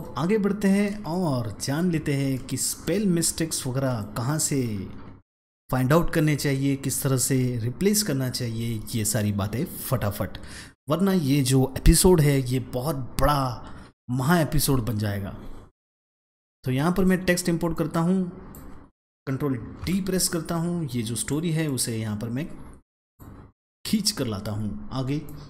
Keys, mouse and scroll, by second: 0.4-0.9 alt+scroll down 2, 0.8 space, 1.2 click, 1.3 space, 1.9-2.5 scroll up 2, 2.2 space, 2.3 click, 2.7 space, 3.3-3.9 alt+scroll down 2, 3.8 space, 3.9 click, 4.3 space, 16.8 click, 17.9 click, 19.7 ctrl+d, 21.1 click, 21.4 click, 25.0 space, 25.1 click.